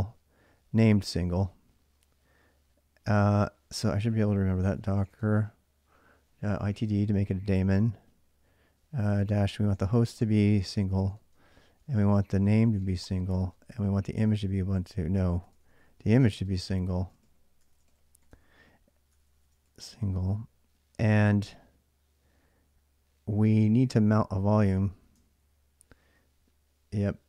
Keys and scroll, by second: 3.7 ctrl+a, 3.9 ctrl+a, 4.3-7.2 typing, 8.5-19.8 typing, 23.5 ctrl+a, 23.5 typing, 23.6 ctrl+a, 24.8-27.2 typing.